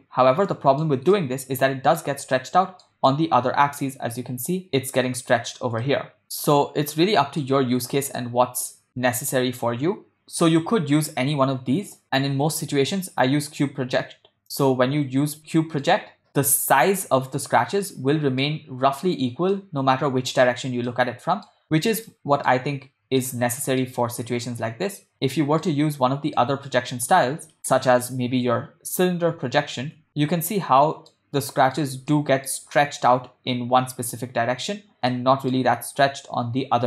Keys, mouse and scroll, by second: 0.1-1.0 ctrl+middle drag, 1.3-2.3 middle drag, 2.6-3.1 ctrl+middle drag, 3.3-4.0 middle drag, 6.0-7.6 middle drag, 8.4 middle click, 9.1-9.8 ctrl+middle drag, 11.3 u, 15.5 middle click, 16.7 Tab, 17.9-18.6 middle drag, 19.6-20.5 middle drag, 21.0-21.6 middle drag, 22.2-22.7 ctrl+middle drag, 23.4-24.1 shift+middle drag, 25.3-26.0 middle drag, 26.1 ctrl+middle click, 27.0 Tab, 28.0 u, 30.0 Tab, 30.1-31.2 middle drag, 31.3-31.9 middle drag, 32.2-32.7 ctrl+middle drag, 35.3-35.7 middle drag.